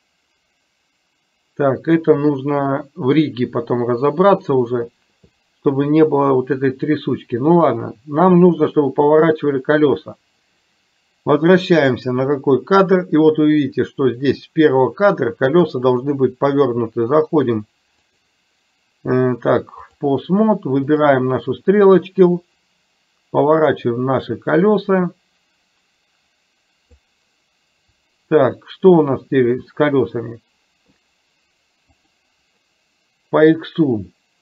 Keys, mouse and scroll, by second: 11.8 click, 15.8 click, 18.1-20.0 drag, 22.6-27.2 drag, 32.0 click.